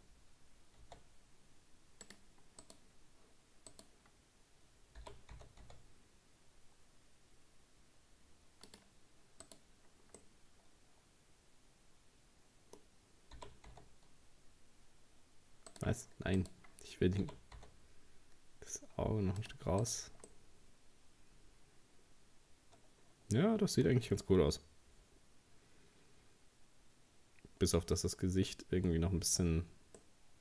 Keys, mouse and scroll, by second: 2.7 right click, 3.7 right click, 5.0 g, 9.5 right click, 10.2-13.2 middle drag, 13.4 g, 16.4 right click, 17.2 g, 19.9 right click, 20.3-23.3 middle drag, 24.3-25.0 scroll down 2, 27.9-29.1 middle drag, 29.1-30.0 scroll up 2, 30.0-30.4 middle drag.